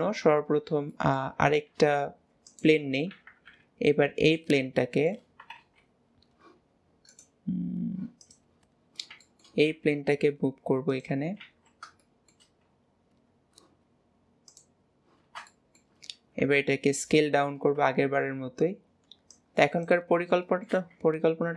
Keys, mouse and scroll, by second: 0.6-0.9 scroll down 2, 1.0 middle click, 1.5 shift+a, 3.5 KP_7, 4.4 scroll down 2, 4.8-5.6 shift+middle drag, 5.6 w, 5.9 scroll up 2, 7.1-8.3 right drag, 8.3 click, 9.2 shift+middle click, 9.8 g, 11.4 alt+z, 12.0 shift+middle click, 12.6 scroll up 1, 14.6 click, 15.6 shift+middle click, 16.2 s, 17.4-17.8 scroll up 1, 17.9 shift+middle click, 18.4 scroll down 1, 19.4 click, 20.2-20.5 scroll up 2, 20.5-21.5 shift+middle drag.